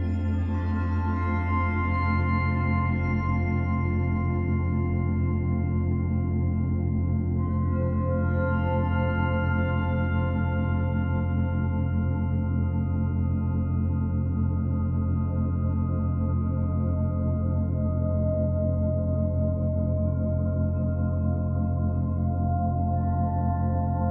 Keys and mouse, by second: 3.8 typing, 4.3-5.2 alt+shift+drag, 8.9-10.9 alt+drag, 11.8 click, 12.4 click, 13.3 ctrl+alt+click, 13.7 alt+shift+click, 14.2 ctrl+alt+click, 14.7 alt+shift+click, 15.2 ctrl+alt+click, 15.7 alt+click, 17.0 click, 17.7 click, 18.7 alt+click, 20.3-22.9 drag.